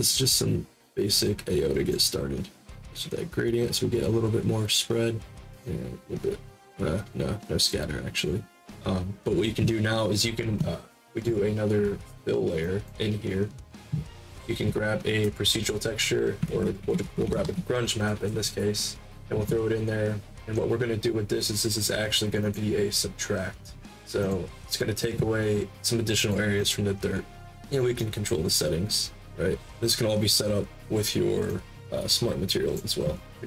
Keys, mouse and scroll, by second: 2.5 middle click, 2.7-5.4 drag, 5.6-8.5 drag, 10.8-12.5 right drag, 12.5 click, 14.2 click, 16.4 ctrl+a, 16.5-17.9 typing, 22.4 click, 24.2 click, 26.1 click, 26.5 click, 27.9-30.7 drag, 31.4-32.7 drag.